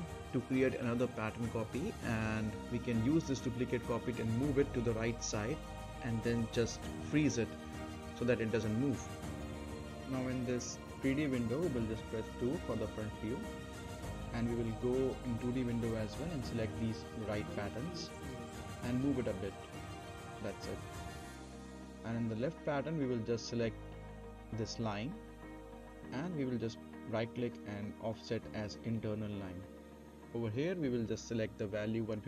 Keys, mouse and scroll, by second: 0.1 click, 0.3 right click, 0.7-1.2 click, 1.2 right click, 1.4 scroll up 1, 1.6 middle click, 1.6 scroll down 1, 1.7 middle click, 1.8 right click, 1.9 middle click, 2.2-3.3 drag, 3.3-3.8 right click, 3.8 scroll down 1, 3.9-4.5 middle click, 4.5 right click, 4.7 middle click, 4.9 scroll down 1, 5.1-5.5 click, 5.5 right click, 5.6 scroll up 1, 5.7 middle click, 5.9 right click, 6.2-6.6 middle click, 6.3 scroll up 1, 6.5 right click, 7.1-7.9 click, 7.7 right click, 7.9 middle click, 8.1 right click, 8.3 scroll up 1, 8.4 right click, 8.7 click, 8.8-9.2 right click, 9.1 middle click, 9.2 scroll down 1, 9.3 middle click, 9.7 click, 9.8 right click, 10.3 click, 11.4-12.0 right click, 12.4 2, 12.8-13.2 scroll down 1, 13.2 middle click, 13.5-14.0 scroll down 1, 14.0-14.9 middle drag, 17.1-17.5 scroll up 1, 17.5 middle click, 18.0 click, 19.6-20.5 drag, 22.0 scroll up 1, 22.3-22.9 middle click, 22.7 scroll down 1, 23.1 middle click, 23.5-23.8 scroll down 1, 23.8 middle click, 25.0 middle click, 25.3 scroll down 1, 25.6 middle click, 26.2 z, 26.5 click, 27.8 right click, 29.5 click, 30.8-31.9 typing.